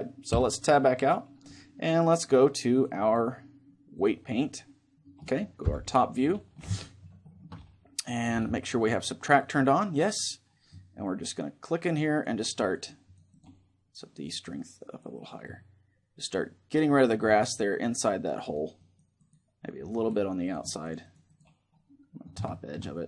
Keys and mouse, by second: 0.0 Escape, 1.6-4.7 drag, 4.3-6.1 middle drag, 5.3 KP_7, 6.5-8.5 middle drag, 9.2 click, 10.5-16.9 drag, 17.5-20.7 drag, 19.3-23.0 middle drag.